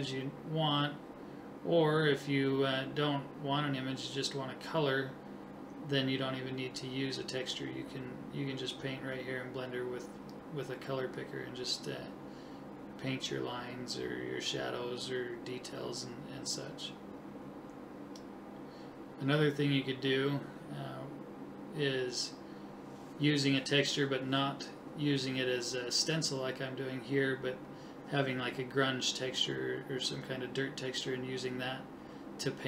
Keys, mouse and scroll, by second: 5.7 click, 6.4 ctrl+z, 7.0-8.2 drag, 9.5 right click, 15.7-16.7 drag, 16.8 click, 17.3 right click, 21.3 click, 21.9 [, 22.4 ], 22.5 ], 22.7 click, 25.1-26.2 right drag, 25.7 click, 27.5 right click, 28.6 click, 31.4 middle click, 31.6-32.6 middle drag.